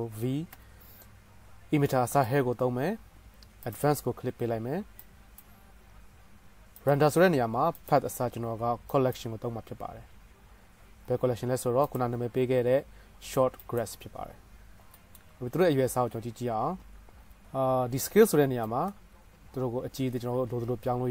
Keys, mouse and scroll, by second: 2.5-3.8 drag, 4.0-5.3 drag, 9.3-14.2 middle drag, 19.4-21.1 shift+middle drag.